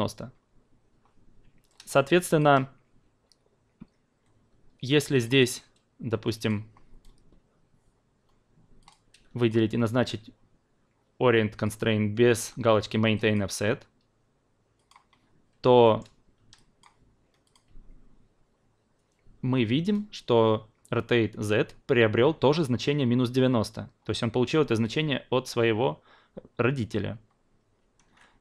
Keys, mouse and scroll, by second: 1.7 alt+middle click, 2.1 alt+click, 5.1 click, 6.4-8.8 drag, 9.5-13.3 shift+drag, 14.7 click, 15.8 alt+middle click, 16.5 drag, 17.4 click, 24.8 click.